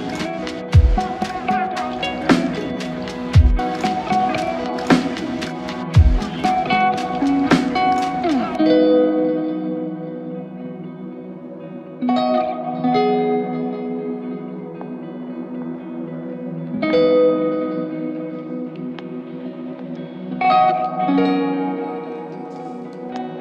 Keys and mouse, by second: 2.8 double click, 15.9 double click, 16.6 ctrl+click, 17.8 alt+click, 18.9 alt+click, 20.4 alt+click, 20.8 ctrl+click.